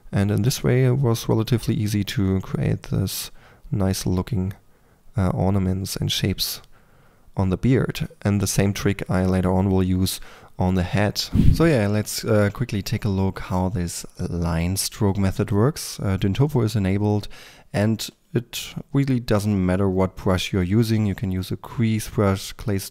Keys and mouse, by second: 0.2 middle drag, 0.5 drag, 1.0-1.4 middle drag, 1.4 click, 1.6-2.0 middle drag, 2.0 click, 2.3 middle drag, 2.6 drag, 3.5-5.0 drag, 5.1 click, 7.6 drag, 7.8 middle drag, 8.0 click, 8.4-9.0 middle drag, 9.0 click, 10.2 middle click, 10.6 click, 10.8 click, 12.5-15.6 drag, 12.5 f, 16.7-20.9 drag.